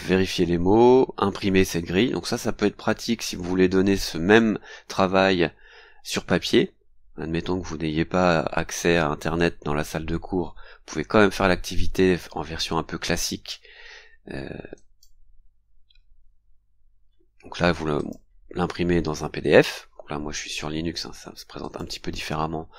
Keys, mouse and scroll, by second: 14.7 click, 17.9 click, 21.6 click, 22.5-22.7 scroll down 4.